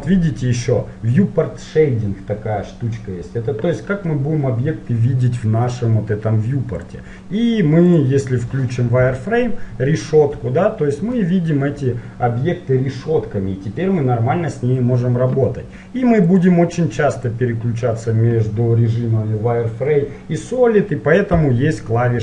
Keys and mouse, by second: 0.5 click, 1.2 click, 7.0-9.4 drag, 9.4-11.3 middle drag, 16.4-18.2 drag.